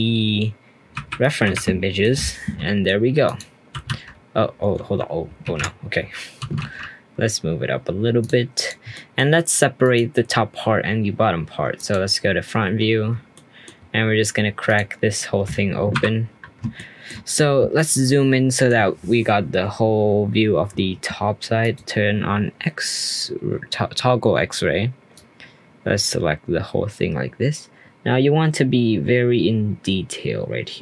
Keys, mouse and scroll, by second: 0.9 Delete, 1.2 click, 2.0-3.2 middle drag, 3.2 click, 3.7 h, 3.8 x, 5.4 ctrl+z, 6.4 g, 8.5 click, 8.9-9.8 middle drag, 9.8 click, 11.7 click, 12.4 scroll up 1, 12.6 Tab, 13.3 shift+middle click, 13.9-14.6 scroll up 2, 14.6 click, 15.9 3, 16.4-16.7 scroll up 1, 16.7 shift+middle click, 17.1-17.7 shift+scroll up 3, 17.7-20.7 shift+middle drag, 21.6 click, 22.5 scroll up 1, 25.1 click.